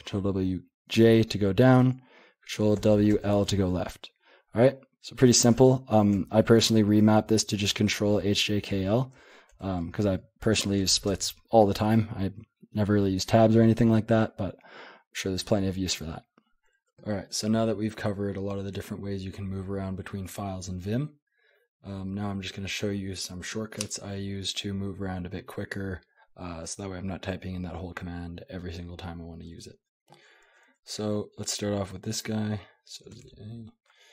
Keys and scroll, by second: 0.9 j, 2.8 ctrl+w, 3.1 l, 5.4 :, 6.1 Escape, 6.9 ctrl+h, 7.2 ctrl+l, 7.6 ctrl+h, 7.9 ctrl+k, 8.5 ctrl+j, 8.7 ctrl+l, 9.1 ctrl+h, 9.5 ctrl+k, 9.8 ctrl+j, 10.0 ctrl+l, 10.4-11.5 typing, 29.9 j, 30.1-30.7 j, 32.8-34.1 typing.